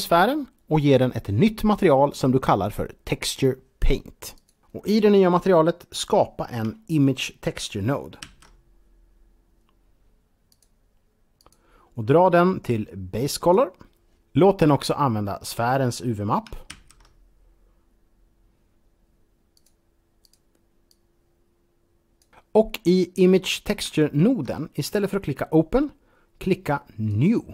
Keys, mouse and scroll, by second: 4.2 click, 5.7-6.2 scroll up 3, 6.6 shift+middle click, 8.1 shift+a, 10.4 click, 11.2 click, 12.5 click, 16.5 shift+a, 19.4 click, 20.2 click, 20.7 click, 22.2-22.9 scroll down 2, 23.2 scroll up 2, 24.0 shift+middle click, 24.5 scroll up 2, 27.0 click.